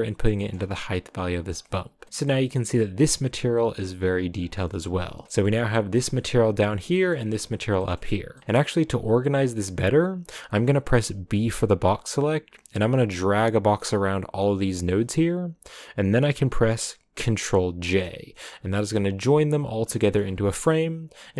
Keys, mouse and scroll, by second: 0.3 middle click, 0.9 scroll up 1, 1.4 scroll down 3, 2.0 middle click, 2.0 scroll up 1, 2.2-4.4 middle drag, 4.4 scroll down 10, 5.0 a, 5.3 middle click, 5.5-5.9 scroll down 1, 5.9 click, 7.2 middle click, 8.1 a, 17.7 ctrl+j, 18.5 a, 18.9 click, 20.2 scroll up 6, 20.8-21.1 scroll up 1, 21.1 click.